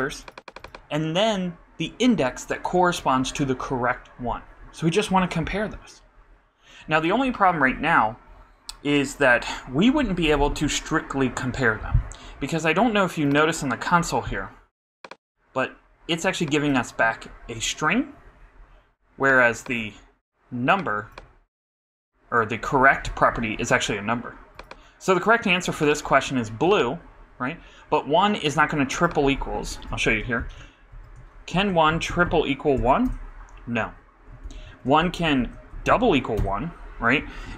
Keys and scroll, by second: 30.4 shift+', 30.9 shift+|, 31.5 shift+', 31.9 shift+=, 34.4 shift+', 34.6 shift+|, 35.4 shift+', 35.7 shift+=.